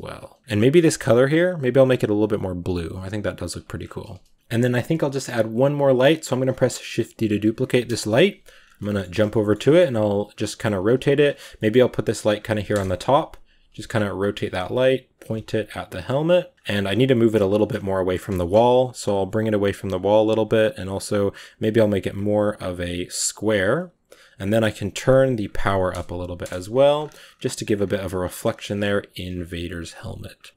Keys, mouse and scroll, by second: 0.4-1.2 scroll up 2, 1.2 click, 3.6 scroll down 4, 3.9 middle click, 3.9 a, 4.3 scroll up 4, 6.5 shift+d, 7.9 KP_Decimal, 8.4 scroll down 2, 8.6-9.0 middle drag, 9.1 shift+middle click, 9.7-12.6 typing, 11.4 middle click, 13.4 scroll down 3, 13.7 r, 14.2 r, 15.2 r, 16.5-17.4 scroll up 10, 16.9-17.3 middle drag, 17.4-18.5 middle drag, 18.5 g, 19.5 r, 21.2 click, 22.3-26.3 drag, 26.3 KP_0, 26.8-27.6 scroll up 5, 27.6-28.1 scroll down 3, 28.1-28.6 scroll up 4, 28.6-28.9 scroll down 4, 28.9 s, 30.4 click, 30.5 s.